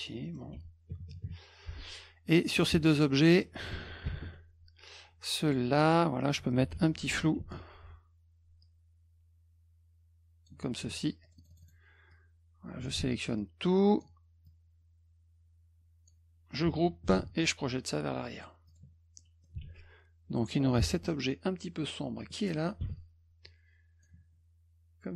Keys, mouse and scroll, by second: 0.2 middle click, 2.4 click, 2.5 click, 2.8 click, 4.0 ctrl+shift+l, 5.5 click, 5.8 click, 7.4 ctrl+shift+f, 8.6-10.5 drag, 11.2 click, 11.4 click, 11.5 click, 11.6 click, 12.1 click, 13.1 z, 13.4 click, 14.5-16.1 drag, 17.1 ctrl+g, 18.3 click, 18.7 click, 19.2 middle click, 19.7 s, 20.8 p, 21.1 middle click, 22.8 b, 23.4 click.